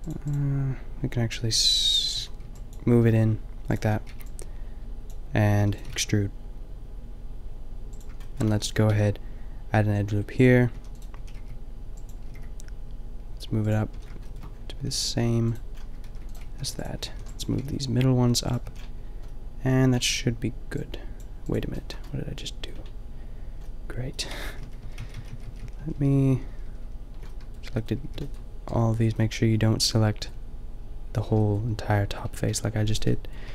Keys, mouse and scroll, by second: 2.2-4.0 typing, 5.5 e, 5.9 g, 8.5 a, 8.9 ctrl+r, 11.1 a, 11.3 b, 12.2 g, 13.9 a, 14.9 ctrl+r, 15.6 click, 16.1 ctrl+r, 16.4-17.5 typing, 18.6 a, 22.0 middle click, 22.8-24.1 middle drag, 24.3 ctrl+z, 24.5 ctrl+z, 24.8 ctrl+z, 26.3 ctrl+z, 27.5 ctrl+z, 28.0 b, 32.4 b, 33.0 click, 33.4 b.